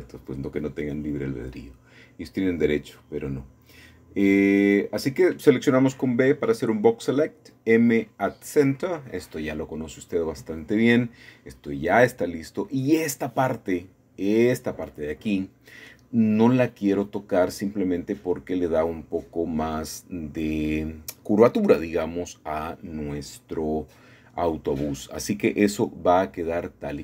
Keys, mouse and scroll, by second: 0.3 click, 1.8 g, 2.6 Escape, 3.8 a, 3.9 a, 4.6 click, 6.4 m, 7.1 click, 8.0 scroll down 2, 8.7 scroll down 1, 8.7 shift+middle click, 9.3 typing, 9.7-11.0 scroll up 2, 11.0-12.1 drag, 12.1 shift+middle click, 12.1 typing, 12.3 shift+middle click, 12.6-15.6 shift+middle drag, 15.6 typing, 16.6 shift+middle click, 19.0-20.1 scroll down 6, 19.8 shift+middle click, 20.7 shift+middle click, 22.0-25.4 shift+middle drag, 25.0-26.0 scroll up 2, 25.6-27.0 shift+middle drag.